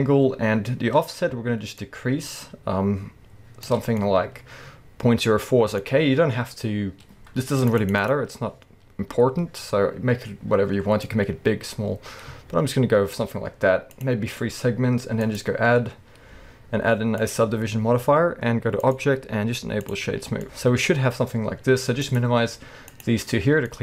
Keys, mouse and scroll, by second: 1.8-4.0 shift+drag, 4.0-7.6 middle drag, 7.6 click, 8.9-10.6 scroll up 1, 11.0-14.0 drag, 15.2-20.4 drag, 20.2 scroll down 2, 20.4-22.0 middle drag, 20.9-22.0 scroll up 2, 22.0 click, 22.9 click, 23.7-23.8 middle drag.